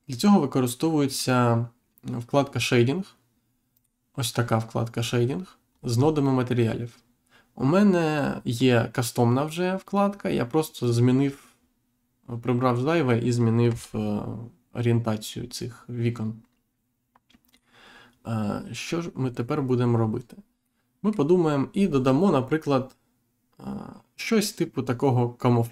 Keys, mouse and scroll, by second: 3.7 click, 5.6-6.0 scroll down 1, 10.7 click, 11.9-12.3 scroll down 1, 12.6 middle click, 13.6 Insert, 17.4 click, 18.9-19.3 scroll up 1, 19.5-19.9 scroll up 1, 20.6 middle click.